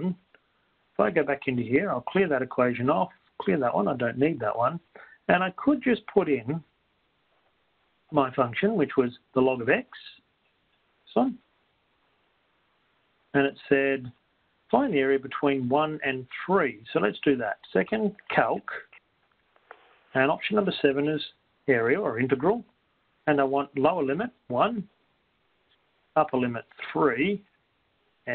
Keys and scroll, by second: 2.9 Down, 4.9 Up, 5.6-6.4 typing, 12.1 x, 14.9 ), 19.2-20.0 typing, 22.8 7, 25.5 1, 25.9 Return, 27.5 3.